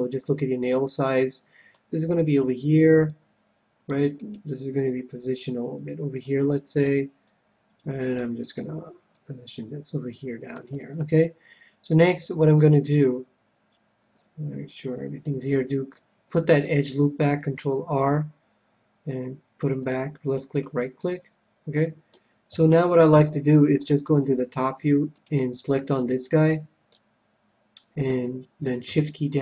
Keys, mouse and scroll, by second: 0.6 middle click, 2.0 a, 2.4 c, 4.2-6.0 right drag, 4.8-6.5 drag, 6.5 a, 6.8 c, 8.5-10.4 right drag, 9.1-11.0 drag, 10.7 a, 11.9-14.4 middle drag, 15.9-17.7 middle drag, 17.4 ctrl+r, 20.5-22.0 right drag, 20.9-22.4 middle drag, 22.4 KP_7, 23.8-25.4 drag, 25.1-26.8 right drag, 26.8-28.4 middle drag.